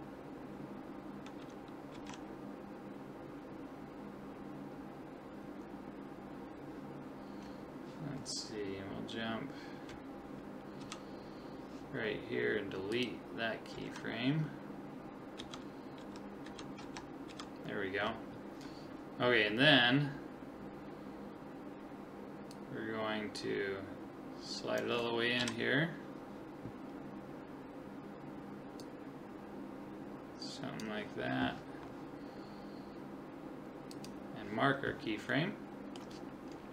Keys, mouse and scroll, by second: 1.4 Right, 1.9 Left, 10.8 Right, 12.9 click, 13.8 Left, 15.4 Right, 16.0 Left, 16.5 Right, 16.8 Left, 17.3 Right, 22.5 click, 25.4 KP_7, 27.0-28.8 middle drag, 28.8-30.5 drag, 33.9 click, 35.3-36.7 middle drag.